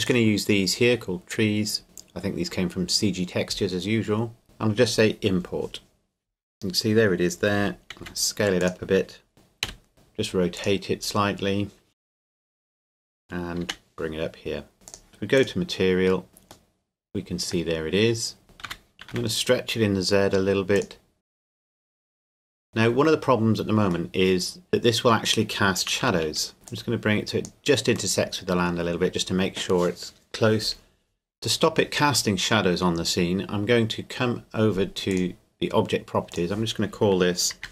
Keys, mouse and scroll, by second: 0.1 click, 4.4 click, 8.0 s, 8.7 click, 9.3 KP_7, 9.6 KP_5, 9.9 r, 10.5 click, 12.0 g, 12.2 click, 12.9 KP_1, 13.6 g, 14.9 click, 16.7 middle click, 18.7 s, 19.1 z, 20.7 click, 24.1 middle click, 26.0 KP_1, 26.5 middle click, 26.7 click, 28.1 middle click, 35.1 click.